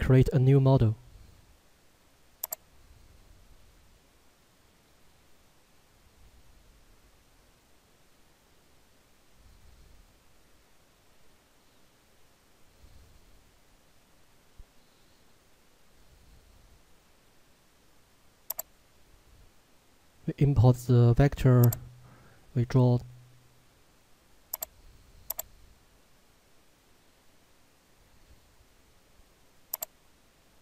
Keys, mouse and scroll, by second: 4.8 click, 18.6 right click, 21.7 click, 24.5 click, 29.8 click.